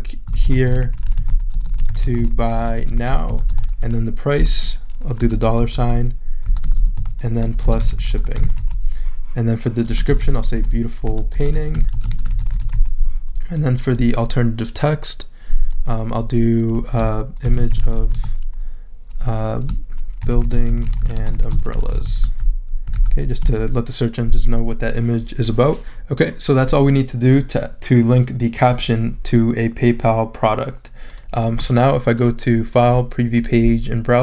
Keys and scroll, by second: 0.0-13.2 typing, 17.2-18.5 typing, 20.0-23.4 typing.